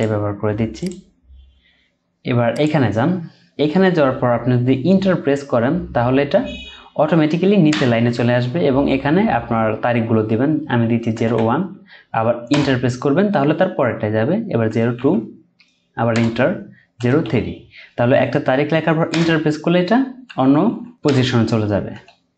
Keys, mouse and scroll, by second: 7.7 Return, 11.1 typing, 12.5 Return, 14.7 typing, 16.1 Return, 17.0 typing, 19.1 Return, 20.3-20.7 typing, 21.0 Return, 21.9-22.3 typing.